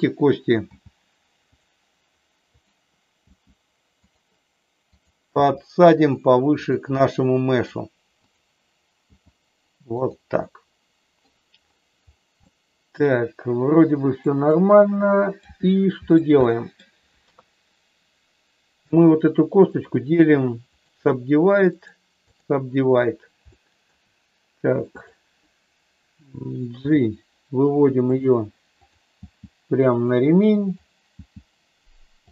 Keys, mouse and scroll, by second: 0.6 g, 2.6 click, 3.2 g, 4.8 click, 5.5 g, 6.6 click, 7.0 middle click, 9.0 g, 10.0 click, 10.4 middle click, 12.4-14.3 middle drag, 14.5 middle click, 16.4 middle click, 17.2 KP_3, 19.6-20.9 right drag, 21.7 right click, 23.5 shift+middle click, 25.0 click, 26.7 g, 28.0 click, 28.7 click, 29.2 g, 29.9 click, 30.7 click, 31.1 g.